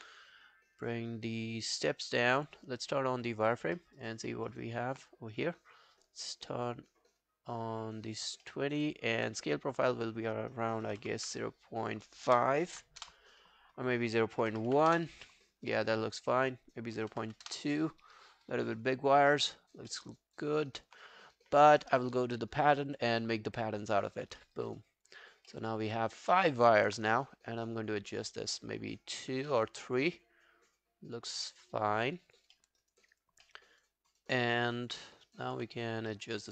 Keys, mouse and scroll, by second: 0.5 scroll down 1, 3.8 alt+middle click, 4.0 alt+right click, 4.3 alt+middle click, 4.5 alt+right click, 8.5 alt+middle click, 8.7 alt+right click, 8.9 alt+click, 10.6-13.0 typing, 13.0 Return, 14.3-15.2 typing, 16.8-17.8 typing, 19.3 alt+middle click, 19.6 alt+right click, 19.9 alt+middle click, 20.1 alt+right click, 20.4 alt+click, 21.2 scroll down 1, 24.4 alt+middle click, 24.7 alt+right click, 24.9 alt+click, 25.3 alt+right click, 25.5 alt+middle click, 25.8 alt+right click, 26.0 alt+click, 26.3 alt+middle click, 26.5 alt+right click, 29.5 alt+middle click, 29.8 alt+scroll down 1, 30.0 alt+click, 32.6 alt+middle click, 32.8 alt+right click, 33.0 alt+click, 33.5 alt+middle click, 33.7 alt+right click, 34.2 alt+click, 34.6 alt+middle click, 34.8 alt+right click, 35.1 alt+middle click, 35.3 alt+right click, 36.1 alt+middle click, 36.3 alt+right click.